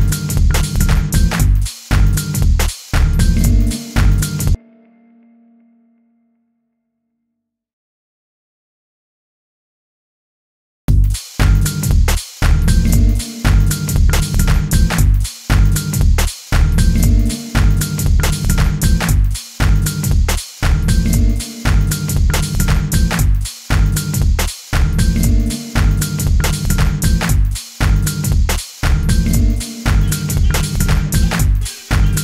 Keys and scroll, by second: 1.6 BackSpace.